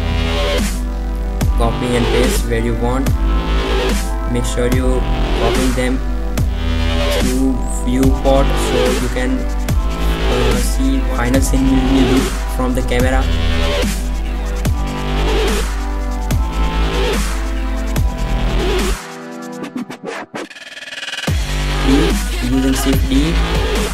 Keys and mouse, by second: 0.1 middle click, 0.7 shift+d, 2.1-2.6 drag, 3.1 r, 3.9 r, 5.2 middle click, 6.3 shift+f, 6.8 shift+d, 7.3 r, 7.8 r, 8.9 click, 9.8 r, 11.3 shift+d, 11.9 r, 12.5 g, 13.3-13.8 drag, 13.8 r, 13.9 r, 15.1-15.6 drag, 15.6 shift+d, 16.2 click, 17.0 r, 17.7 click, 18.1 click, 18.6 r, 19.0-19.6 drag, 20.6-22.1 drag, 22.1 KP_0, 22.8 KP_0, 23.4 shift+d.